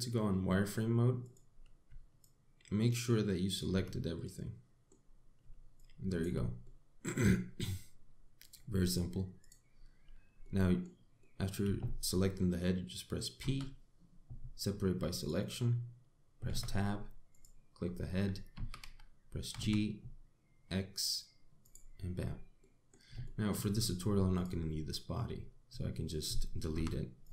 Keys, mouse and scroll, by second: 1.9 click, 2.8 shift+click, 4.9 middle click, 6.4 shift+click, 7.3 middle click, 9.0 click, 10.1 click, 10.6-11.1 scroll down 3, 11.1 middle click, 11.8 shift+middle click, 12.5 scroll up 1, 14.0 p, 17.3 Tab, 18.0 click, 18.5 scroll down 4, 19.2 g, 23.2 middle click, 23.9 shift+middle click, 24.3 scroll down 2, 25.0 click.